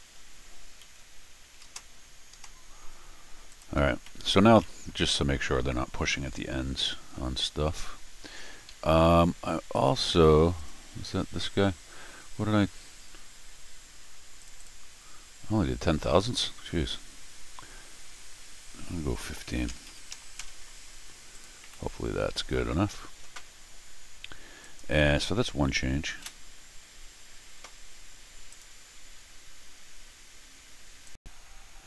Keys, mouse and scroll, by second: 1.5 4, 2.3 Return, 3.5 click, 4.0 scroll down 2, 5.1 scroll down 2, 8.7 Escape, 9.7 click, 10.6 click, 12.2-12.8 scroll down 2, 14.4 click, 14.6 click, 21.3-24.8 drag, 21.6 r, 26.1 ctrl+alt+shift+r, 28.5 click, 31.0 click.